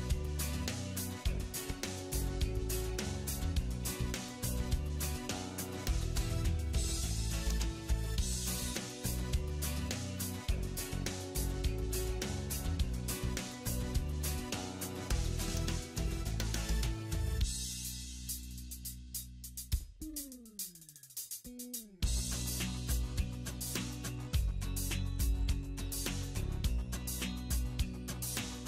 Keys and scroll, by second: 0.9 ctrl+z, 12.9 alt+w, 21.0 alt+x.